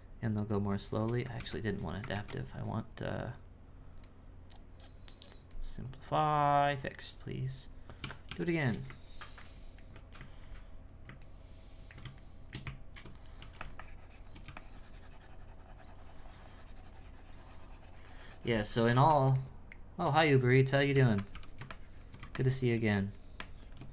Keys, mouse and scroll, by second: 2.1 ctrl+z, 3.2-6.3 drag, 8.3 shift+r, 11.3-12.6 ctrl+middle drag, 12.6 Tab, 13.8-17.6 shift+drag, 19.4-20.9 shift+middle drag, 20.9 g, 21.7-23.9 shift+drag.